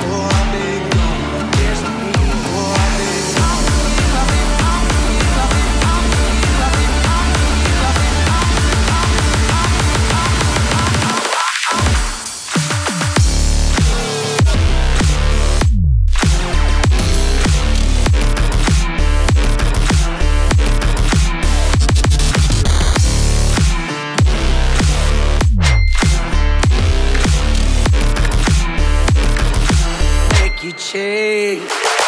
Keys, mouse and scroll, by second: 0.3 click, 0.5-2.0 typing, 2.7 click, 3.5-4.6 typing, 5.8 click, 7.3 typing, 9.7-22.0 drag, 22.0-32.0 drag.